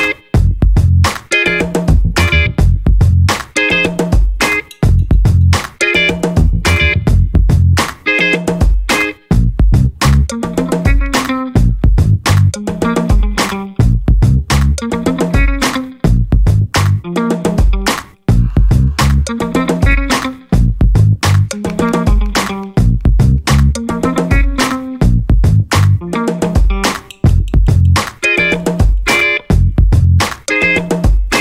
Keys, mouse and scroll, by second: 1.3 click, 2.7 click, 3.5 u, 3.8 0, 5.1 click, 6.8 click, 7.9 click, 8.9 5, 9.5 0, 10.6 click, 11.2-12.8 scroll down 8, 13.1 click, 14.6 click, 15.7 click, 17.2 click, 19.5 5, 19.9 0, 22.7 click, 23.8 4, 24.2 5, 25.9 click, 28.0 0, 28.8 click, 29.5 click, 30.5 scroll down 1.